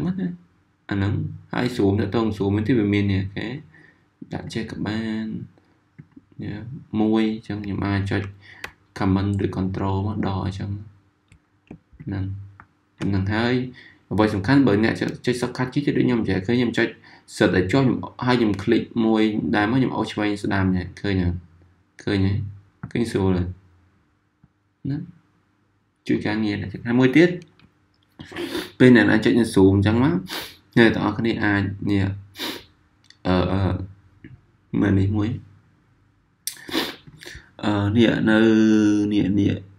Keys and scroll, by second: 9.3 super+-, 10.1 super+-, 10.7 super+-, 12.5 super+-, 15.1 z.